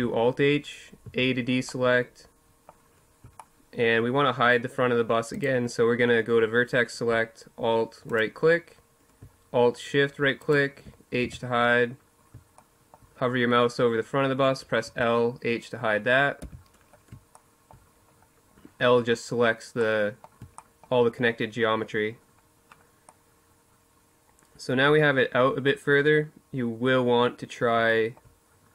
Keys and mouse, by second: 4.1-8.6 drag, 8.6 middle click, 9.1-10.9 drag, 9.9 h, 10.9 middle click, 11.3-13.1 drag, 13.6 l, 15.1 h, 18.5 middle click, 21.2 middle click, 23.2 middle click, 24.4-26.2 middle drag, 26.6-28.7 middle drag.